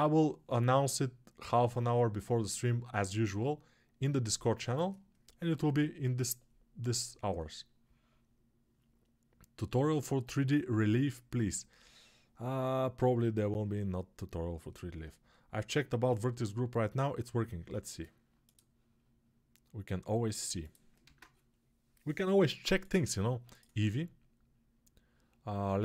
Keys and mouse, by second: 20.9 ctrl+space.